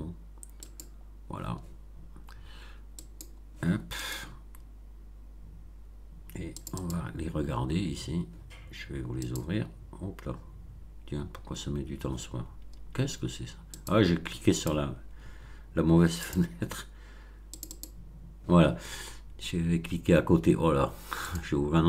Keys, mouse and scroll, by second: 0.6 click, 2.9 click, 3.9 click, 6.5 click, 9.2 click, 13.7 click, 14.5 click, 16.1 click, 17.4 click, 21.2 click.